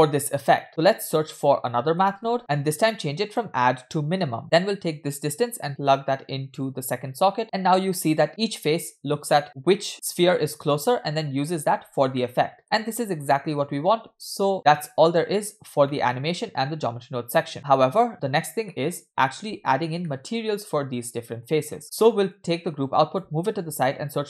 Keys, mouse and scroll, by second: 0.7-1.4 scroll up 3, 1.4 shift+a, 2.4 middle click, 2.4 click, 2.4-3.0 scroll up 3, 3.3-4.4 drag, 4.4 scroll down 1, 5.0-6.7 drag, 7.4 space, 12.2 middle click, 13.5-14.3 scroll up 3, 14.5-14.8 scroll down 1, 15.1-15.9 scroll down 1, 15.9 scroll down 3, 16.0-17.4 middle drag, 17.7 scroll up 4, 17.7 space, 18.7 shift+middle click, 19.7 scroll down 2, 20.1 shift+middle click, 20.4-21.7 scroll up 2, 21.8 middle click, 21.8-22.3 scroll up 3, 22.4-23.3 drag, 23.7 shift+a.